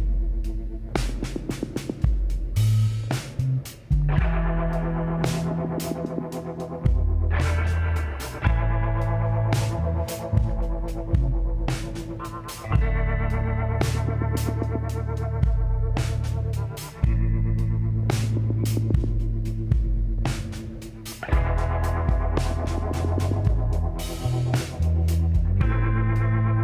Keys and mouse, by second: 3.5 middle click, 4.5 a, 5.7 alt+h, 6.4-7.6 drag, 6.4 a, 9.2 Tab, 11.7 KP_Divide, 12.3 middle click, 12.7 middle click, 13.2 z, 17.0 middle click, 17.4 Tab, 18.4 z, 18.8-20.6 drag, 19.2 b, 20.6 z, 21.3-23.0 drag, 23.9-25.8 drag, 24.3 z, 24.8 b, 25.9 z, 26.4-26.6 drag.